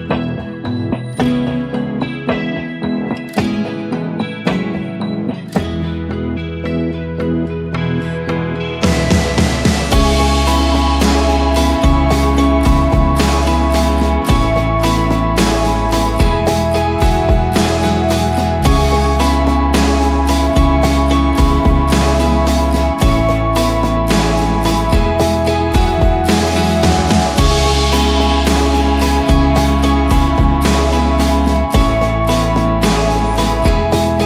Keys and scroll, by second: 1.6 ctrl+g, 3.0-4.4 typing, 6.8 ctrl+a, 7.8 ctrl+d, 8.1-8.6 shift+Up, 8.7 shift+Left, 8.9 shift+Left, 9.1 shift+Left, 9.2 shift+Left, 10.2 ctrl+a, 10.9 ctrl+d, 11.2-11.5 space, 11.8 shift+Left, 12.0 shift+Left, 12.2 shift+Left, 12.3 shift+Left, 12.6 shift+Up, 12.7 shift+Up, 13.6 ctrl+0, 18.4-19.7 typing, 22.3-23.1 typing, 25.0 6, 25.6 Return, 28.5-32.9 typing, 31.9 Left, 32.1 Left, 32.2 Left, 32.3 Left, 33.6 Return.